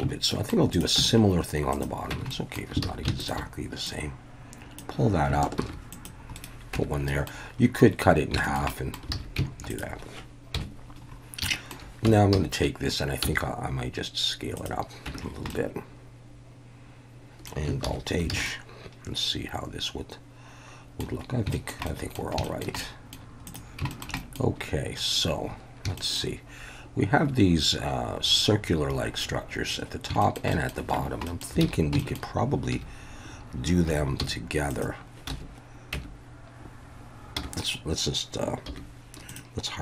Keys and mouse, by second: 0.3 shift+middle click, 0.7 click, 1.0 Tab, 1.7 click, 2.1 Tab, 2.3 middle drag, 2.8 alt+a, 3.2 alt+shift+click, 3.9 click, 5.6 ctrl+r, 6.4 right click, 6.7 Tab, 7.1 middle click, 8.4 shift+middle click, 8.7 middle drag, 9.1 alt+a, 9.7-10.6 drag, 10.6 KP_1, 11.5 shift+middle click, 12.1 Tab, 12.3 a, 13.2 s, 14.6 click, 15.1 Tab, 15.5-17.5 drag, 17.9 alt+h, 18.3 alt+a, 18.5-21.0 drag, 21.5 shift+middle drag, 21.8 middle drag, 22.4 shift+middle drag, 22.8 middle click, 23.9 shift+middle click, 24.2 middle click, 26.0 shift+middle click, 30.2 shift+middle click, 30.5 middle click, 30.9 Tab, 31.2 middle click, 31.6 alt+a, 32.0 shift+middle click, 32.7 2, 33.9 3, 34.2 c, 35.3 Escape, 35.3 `, 35.9 Tab, 37.4 /, 38.7 /, 39.3 click.